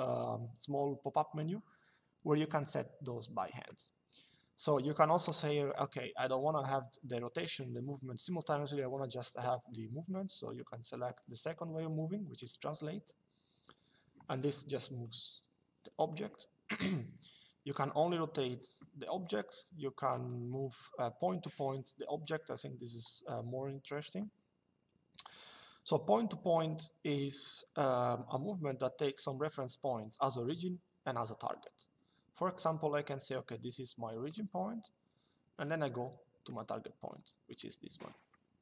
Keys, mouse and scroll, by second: 8.1 click, 9.8 click, 14.7 click, 17.4 click, 19.8 click, 34.0 click, 36.2 click, 37.3 middle click.